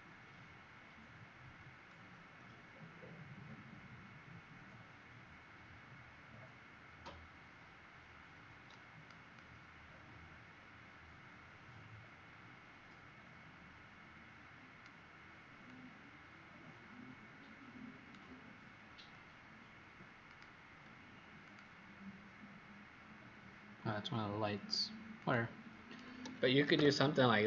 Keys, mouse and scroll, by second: 9.2 click, 15.6 click, 20.2 alt+click, 21.3 click, 26.7 w.